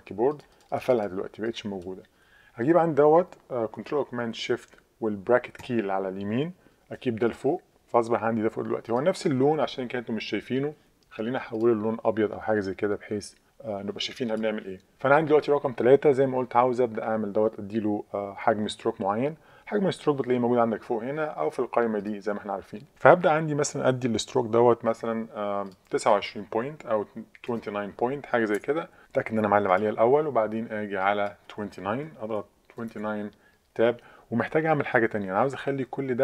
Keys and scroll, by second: 27.2-28.0 typing, 28.6 Tab, 32.0 2, 32.8 9, 32.9 Tab.